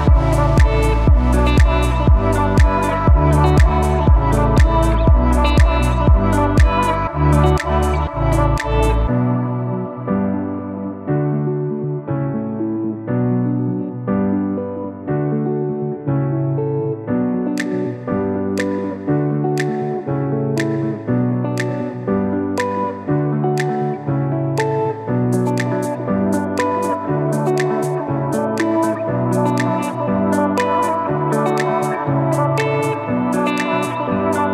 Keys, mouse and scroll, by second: 3.0 click, 14.0-14.6 scroll up 1, 14.6 z, 16.3-23.5 drag, 24.5 i, 25.0-25.6 shift+scroll up 1, 25.6 shift+scroll down 1, 26.3 shift+click, 27.0-28.2 scroll down 1, 28.2 click, 29.0 i, 30.4 shift+click, 32.3-34.0 scroll down 1.